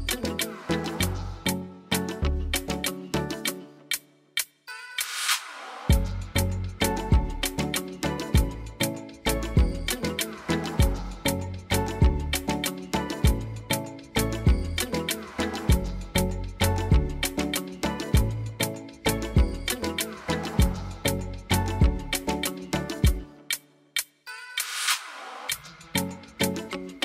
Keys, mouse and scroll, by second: 2.5 click, 9.1 click, 11.3 click, 12.1 click, 18.4 click, 19.3 click, 19.7 click, 20.3 click, 22.3 click, 23.8 click, 26.8 click.